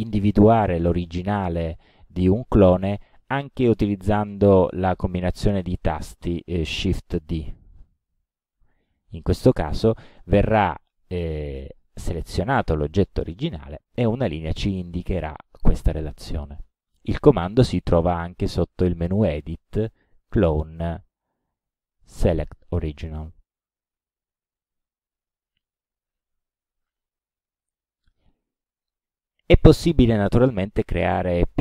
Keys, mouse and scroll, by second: 3.2 click, 7.4 shift+d, 17.4 click, 25.6 click, 29.7-30.5 drag.